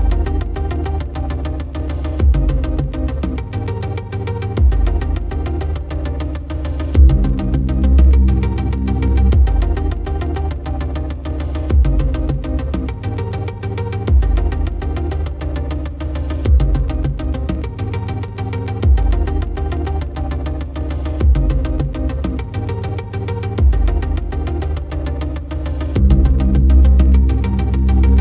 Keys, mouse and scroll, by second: 0.9 click, 1.3 Tab, 2.5 s, 5.2 click, 5.9 s, 6.8 click, 7.5 r, 8.3 click, 9.5 click, 10.8 s, 13.0 click, 13.6 r, 16.3 click, 16.7 Tab, 17.2 click, 18.1 click, 18.5 click, 18.6 click, 18.7 click, 22.6 click, 25.2-27.0 drag.